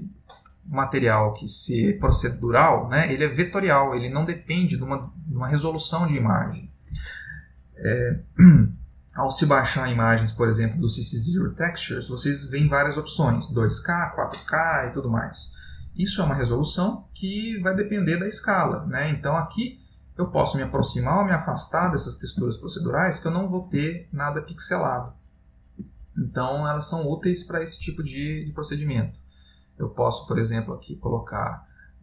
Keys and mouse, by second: 1.3 click, 18.3 ctrl+middle click, 22.8 ctrl+middle click, 25.0 ctrl+middle click, 26.3 ctrl+middle click, 30.1 middle click, 30.1 click.